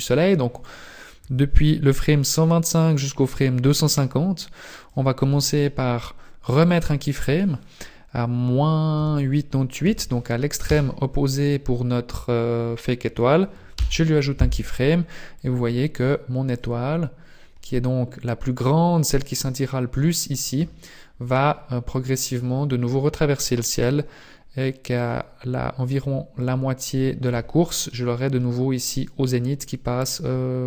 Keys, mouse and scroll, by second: 3.9 click, 6.5 click, 9.9 KP_8, 10.7 KP_8, 13.7 i, 15.4 click, 23.5 click, 25.9 click.